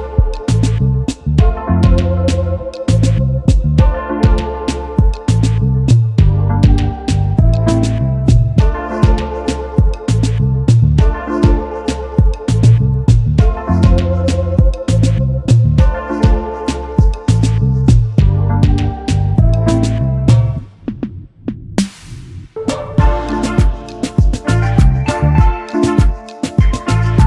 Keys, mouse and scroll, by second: 11.5 alt+click, 17.0 alt+click, 19.8 alt+click, 26.1 alt+click.